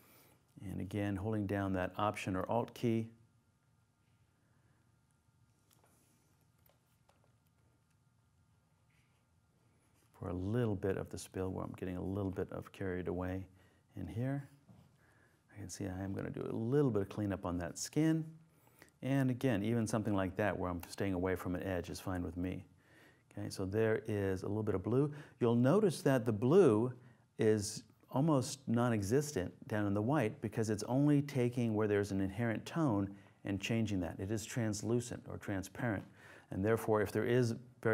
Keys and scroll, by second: 6.4 super+0.